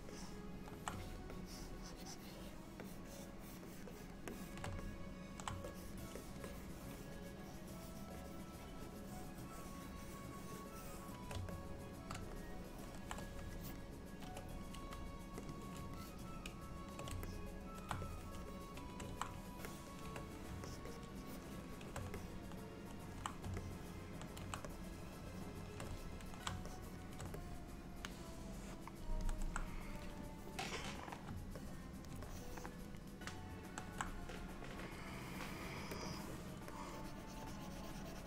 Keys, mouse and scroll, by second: 0.2 middle click, 1.1 shift+click, 1.4 shift+click, 3.0 shift+click, 3.1 shift+click, 3.7 shift+click, 3.9 shift+click, 4.3 shift+click, 4.9 middle click, 5.7 shift+click, 6.4 shift+click, 8.3 shift+click, 8.3 shift+click, 11.6 middle click, 12.4 shift+middle click, 13.6 shift+click, 14.8 f, 16.0 shift+click, 17.3 middle click, 18.1 shift+click, 18.3 shift+click, 20.1 shift+click, 20.7 shift+click, 21.0 shift+click, 21.3 shift+click, 21.6 shift+click, 21.8 shift+click, 22.2 middle click, 23.7 middle click, 24.8 shift+click, 26.0 middle click, 26.7 shift+click, 27.5 middle click, 31.7 middle click, 32.3 shift+middle click, 36.1 click, 36.8 click.